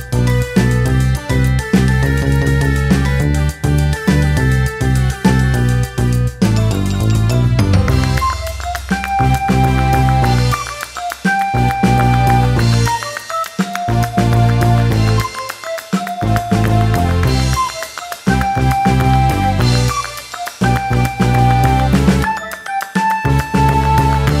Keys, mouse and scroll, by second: 0.0-18.3 typing, 0.2 shift+middle click, 0.5 shift+middle click, 1.5 shift+click, 2.3 shift+middle click, 2.4 scroll up 3, 2.5 shift+middle click, 3.2 shift+middle click, 3.3 scroll up 1, 3.5 scroll down 3, 3.5 shift+middle click, 3.9 scroll up 1, 3.9 shift+middle click, 4.2 shift+middle click, 5.2 shift+middle click, 5.8 shift+middle click, 6.3 shift+middle click, 6.8 shift+middle click, 7.2 shift+middle click, 7.3-7.6 scroll up 4, 7.6 shift+middle click, 8.5 shift+middle click, 9.5 shift+middle click, 9.9 shift+middle click, 10.0 scroll down 1, 10.2 scroll up 3, 10.3 shift+middle click, 10.7 shift+middle click, 11.6 scroll down 2, 11.7 shift+middle click, 12.4 scroll up 3, 12.5 shift+middle click, 12.7 scroll down 2, 13.3 shift+middle click, 13.3 scroll up 3, 13.6 shift+middle click, 14.6 shift+middle click, 14.7 scroll up 2, 14.8 shift+middle click, 15.2 shift+middle click, 15.2 scroll up 1, 15.9 shift+middle click, 16.3 shift+middle click, 16.8 shift+middle click, 17.6 scroll up 2, 18.2 shift+middle click, 19.1 shift+middle click, 19.1 scroll up 2, 19.4-21.1 typing, 19.5 shift+middle click, 20.0 shift+middle click, 20.1 scroll up 1, 22.1 shift+middle click, 22.2 scroll down 3, 22.3-24.4 typing, 22.5 shift+middle click, 22.6 scroll up 1, 22.7 shift+middle click, 23.1 shift+middle click, 23.4 shift+middle click.